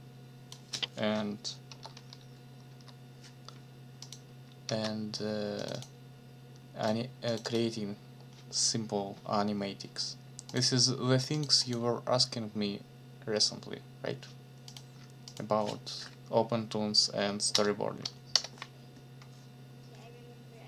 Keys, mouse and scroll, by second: 1.7 p, 2.7 m, 4.0 click, 4.6 ctrl+s, 5.6 click, 6.8 click, 7.3 click, 10.5 click, 11.3 click, 14.7 click, 15.3 click, 17.5 Up, 18.3 Return.